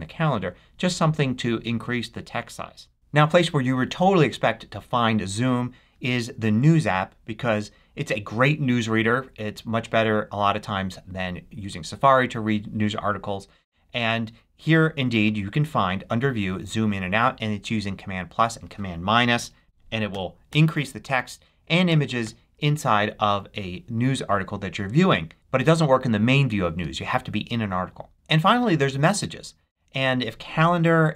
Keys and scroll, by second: 19.3 super+=, 21.8 super+-.